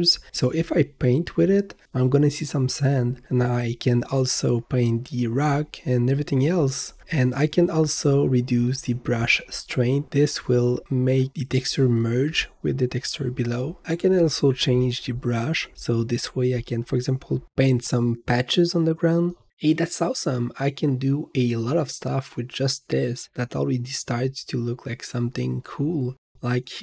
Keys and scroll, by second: 3.1-3.8 typing, 7.4 h, 14.0-14.8 typing, 16.4 v, 17.3 n.